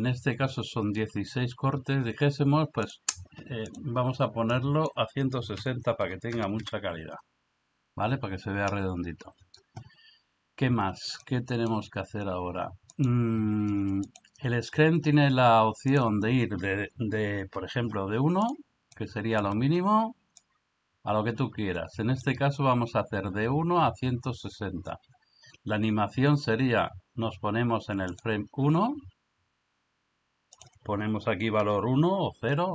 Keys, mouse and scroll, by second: 2.8 click, 4.7-6.6 drag, 11.2-11.7 middle drag, 14.2 click, 15.9-18.4 drag, 19.0-19.4 middle drag, 20.4-22.3 drag, 28.1 click, 30.6-32.7 drag.